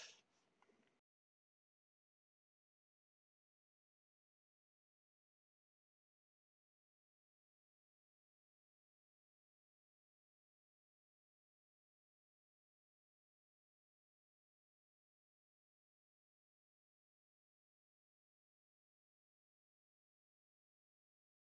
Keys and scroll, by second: 0.6-1.4 typing.